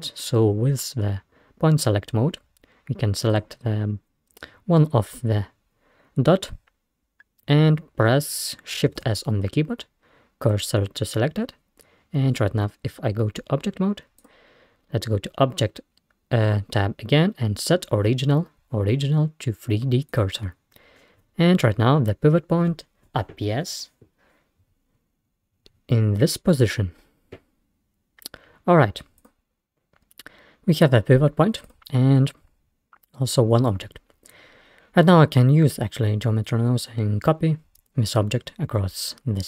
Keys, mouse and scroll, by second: 3.3 click, 4.2 scroll up 1, 9.0 shift+s, 12.7 Tab, 14.2-17.0 drag, 26.7 scroll down 1, 29.2 click, 29.8-30.3 scroll down 1, 31.7 click, 34.0-34.3 scroll down 2.